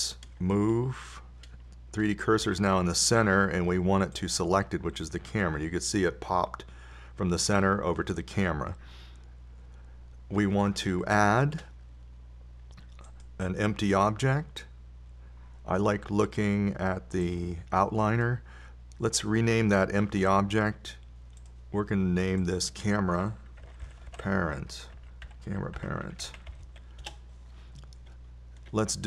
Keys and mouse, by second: 3.8 shift+s, 12.8 shift+a, 18.6-20.3 drag, 22.8-25.4 drag.